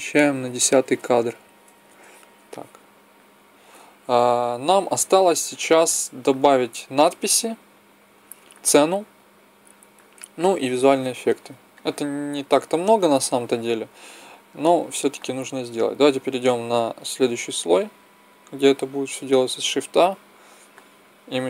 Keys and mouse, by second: 6.0-7.1 drag, 11.7-16.1 middle drag, 12.9 a, 19.6 shift+a.